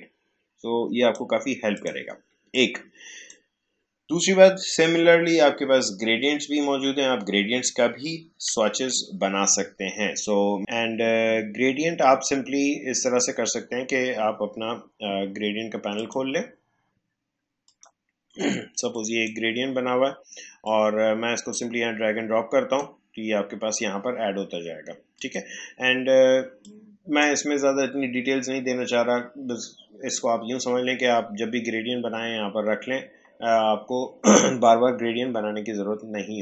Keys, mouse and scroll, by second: 8.7 Delete, 15.9 click, 17.7-25.1 drag, 25.1-29.5 drag.